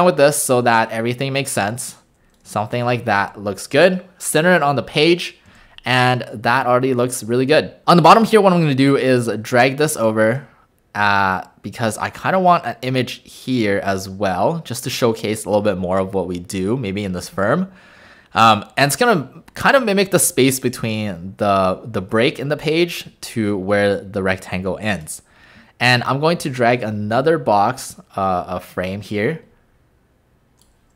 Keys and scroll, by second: 3.2 shift+w, 5.5 w.